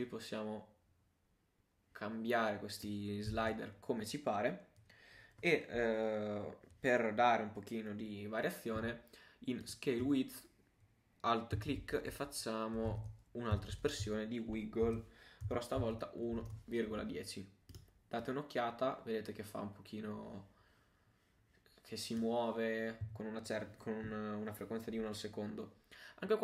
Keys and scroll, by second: 3.4 super+z, 13.3-14.2 typing.